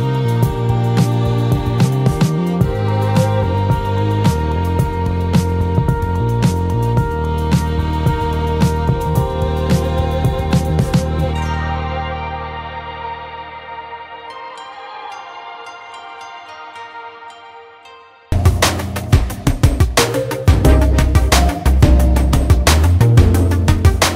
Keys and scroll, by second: 12.6-17.5 ctrl+z.